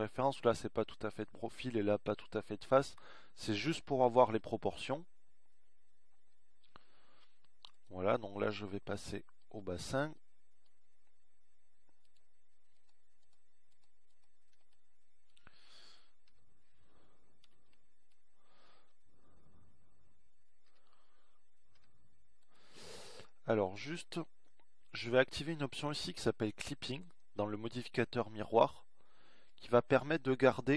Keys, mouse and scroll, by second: 17.2-18.8 drag, 18.8 KP_1, 20.0 z, 23.2 r.